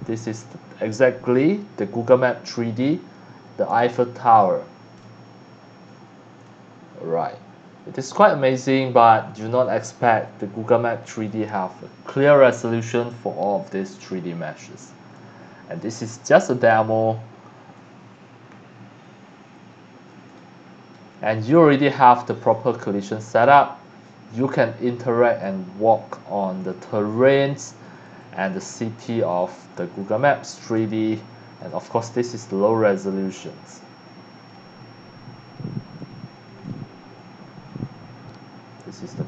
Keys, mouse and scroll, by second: 9.0 space, 16.6 space, 30.2 space.